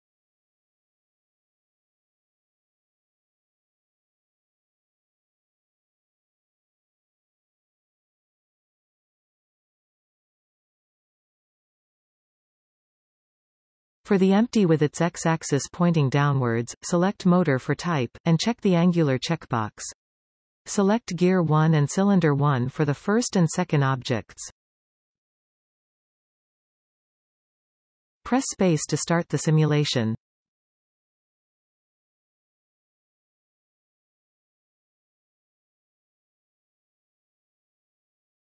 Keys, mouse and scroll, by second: 0.7 click, 2.3-4.8 drag, 7.1 click, 12.2 click, 13.3 click, 13.7 click, 15.4 click, 16.4-19.3 drag, 20.7 click, 23.1 click, 24.9-25.2 scroll down 1, 25.4-28.8 middle drag, 28.8 space, 31.6 KP_1, 32.0 KP_7.